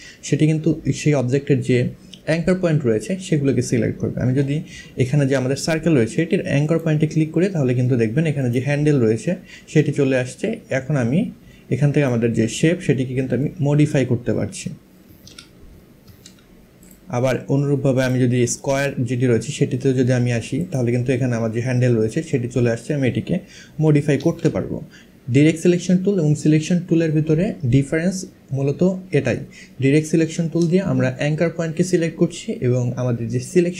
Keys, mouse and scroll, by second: 6.3 click, 8.0 click, 9.4 click, 13.1 click, 14.7 ctrl+z, 15.7 ctrl+z, 16.5 click, 17.6 click, 20.2 click, 21.7 click, 23.8 ctrl+z.